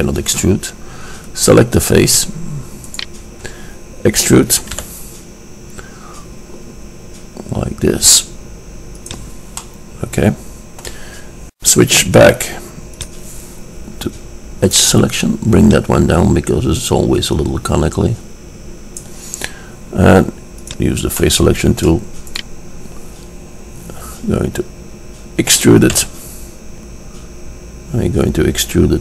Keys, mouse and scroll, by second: 3.0-4.4 middle drag, 4.4 click, 4.9 e, 9.7-11.7 middle drag, 13.2-17.4 drag, 14.8 right click, 15.7-16.5 right drag, 20.9-24.2 drag, 22.5 right drag, 22.6 middle click, 22.7 right click, 24.2 middle click, 26.2 e.